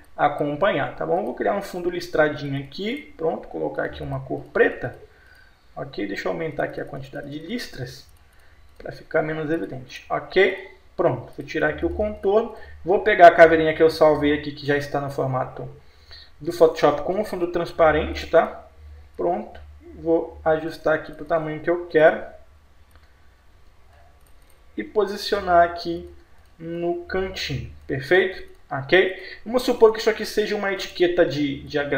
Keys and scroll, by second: 17.1 p, 17.8 F4, 31.0 space.